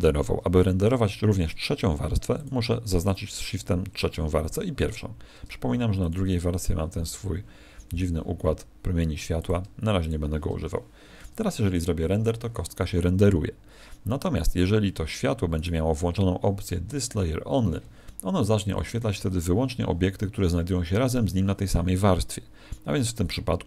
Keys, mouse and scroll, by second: 2.3 shift+click, 5.9 click, 9.3 click, 9.9 shift+click, 14.5 Escape, 15.5 right click, 18.6 click.